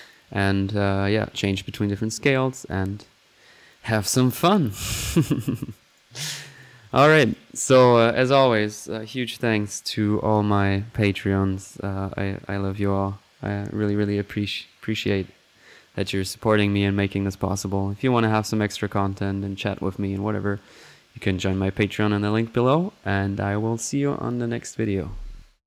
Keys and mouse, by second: 2.5-2.8 drag, 3.3 middle click, 3.7-4.1 drag, 4.6 middle click, 4.7 click, 5.3 drag, 5.8 right click, 6.2 click, 6.5 right drag, 6.9-7.2 alt+drag, 7.2 alt+right drag, 7.6 alt+right click, 7.6 alt+click, 9.7 typing.